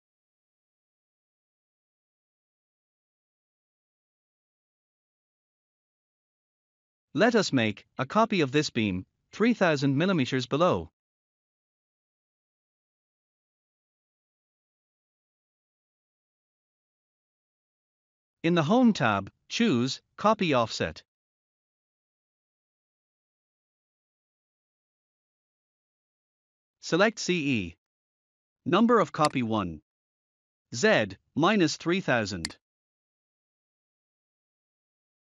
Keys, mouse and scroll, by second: 0.7 scroll down 1, 18.1 click, 25.1 click, 29.2 click, 32.4 click.